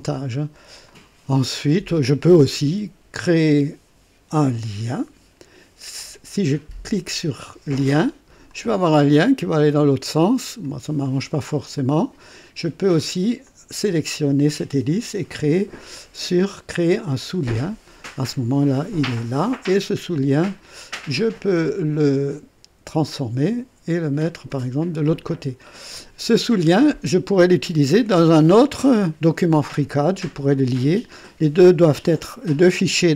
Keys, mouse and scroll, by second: 0.8 click, 4.8 click, 8.4 click, 9.6-10.7 drag, 11.7 click, 13.4 click, 17.1 click, 19.7 scroll down 2, 20.5 right click, 23.0 click, 24.4-25.4 drag, 25.9 click, 27.0 scroll down 2.